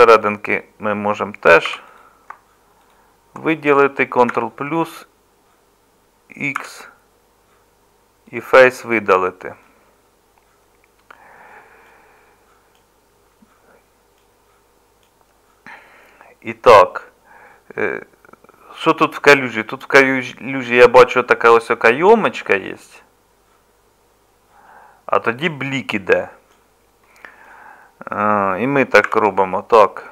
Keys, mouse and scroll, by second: 1.7 3, 4.3 ctrl+KP_Add, 6.6 x, 29.1 1.